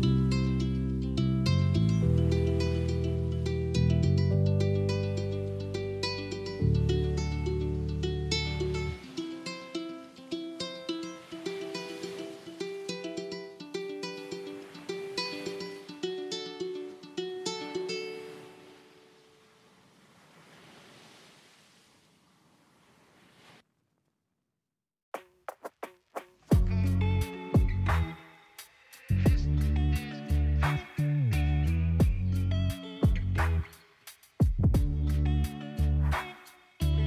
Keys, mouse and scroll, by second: 0.4-3.4 middle drag, 5.9-7.3 middle drag, 7.3 click, 7.9 click, 9.6 click, 9.9 click, 10.7 click, 12.3 click, 12.6-13.7 middle drag, 13.7 scroll down 3, 14.4-14.9 scroll up 2, 14.9 click, 15.5 middle click, 16.3 click, 17.1 click, 17.4 middle click, 18.4-18.9 scroll down 3, 18.9 scroll up 4, 19.4-20.5 shift+middle drag, 20.5 click, 24.3 ctrl+a, 24.9 Tab, 27.2 ctrl+b, 30.7 Tab, 31.0 click, 31.5 middle click, 32.1 click, 33.4 right click, 33.9 click, 34.9-36.1 middle drag, 36.1 click.